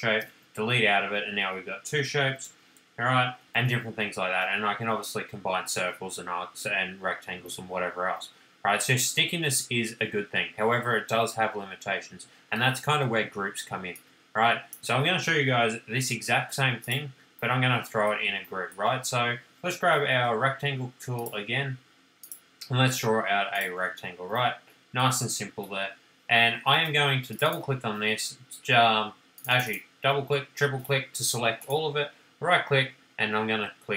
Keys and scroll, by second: 1.9 ctrl+z, 3.2 super+z, 26.5 space.